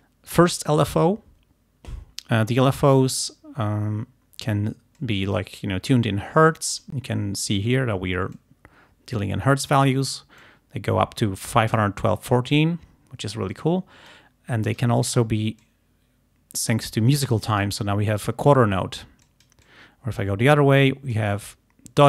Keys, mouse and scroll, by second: 5.0-7.1 drag, 8.4-10.1 drag, 10.5-12.0 drag, 12.4-14.4 drag, 14.8 click, 15.6-17.9 drag, 19.3-20.4 drag, 21.2-22.0 drag.